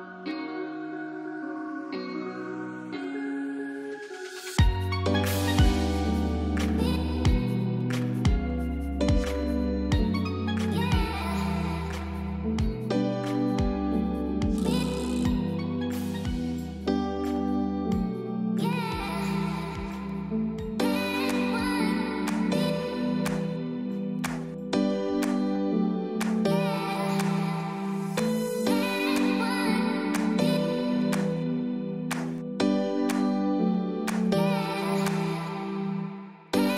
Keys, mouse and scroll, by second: 0.2 click, 2.4-3.3 scroll down 1, 3.3-4.1 scroll up 1, 4.1-4.5 scroll down 1, 4.5-5.0 scroll up 1, 6.2 ctrl+0, 7.9 F12, 8.3 scroll up 1, 8.7-9.9 scroll down 1, 9.9 click, 12.6-13.0 scroll down 1, 13.0-13.7 scroll up 1, 13.7 scroll down 1, 13.9-14.7 scroll up 1, 14.7 scroll down 1, 14.9 scroll up 1, 16.6-19.0 typing, 17.4 click, 17.9 click, 18.1 click, 19.1 click, 19.8 click, 20.1-26.5 typing, 21.0 click, 22.2 click, 22.5 click, 22.9 click, 23.6 click, 23.9 click, 24.3 click, 26.6 click, 27.0-27.9 scroll down 1, 27.9-28.4 typing, 28.2 click, 28.9-29.7 scroll down 1, 29.7-30.3 scroll up 1, 31.7 click, 32.3 scroll up 1, 32.5 space, 32.7 click, 33.0 space, 33.9 space, 35.7 click.